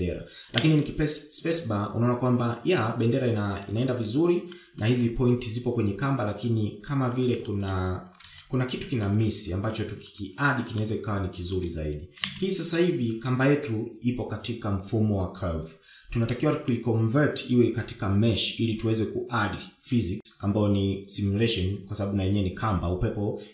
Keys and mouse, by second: 2.2 space, 6.2 shift+middle click, 9.1-9.4 shift+middle drag, 10.1-10.7 shift+middle drag, 12.5-13.2 shift+middle drag, 13.9 space.